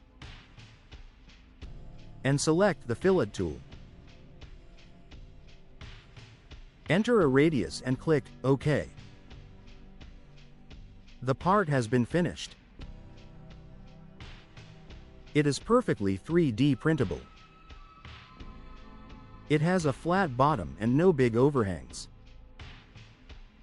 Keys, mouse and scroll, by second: 4.6 click, 7.3 0, 8.5 click, 9.6-14.4 drag, 14.7 click, 15.4-16.5 drag, 17.3 middle click, 17.6 middle click.